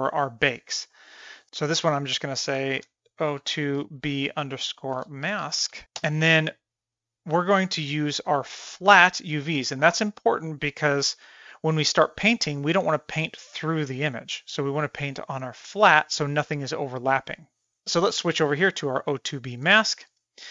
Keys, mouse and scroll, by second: 7.3-8.9 drag, 18.4-20.1 drag.